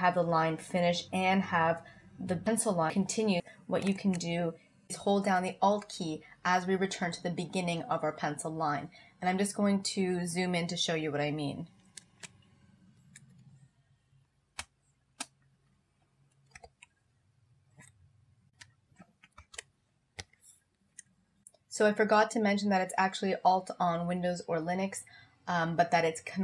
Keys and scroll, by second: 3.9 super+z, 12.0 alt+z, 14.6 space, 16.5 super+-.